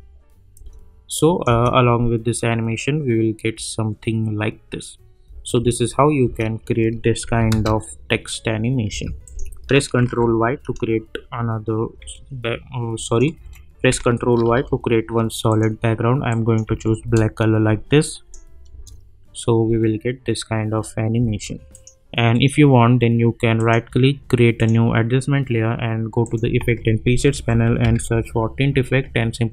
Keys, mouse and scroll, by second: 0.5 space, 1.1 click, 1.4 space, 5.5 space, 7.2 n, 7.5 space, 9.2 click, 10.0 ctrl+y, 12.0 Return, 13.0 click, 14.4 ctrl+y, 15.5 click, 16.6 Return, 18.0 click, 18.7 space, 21.1 space, 21.7 click, 22.3 right click, 23.5 click, 26.6 ctrl+a, 27.1-28.4 typing.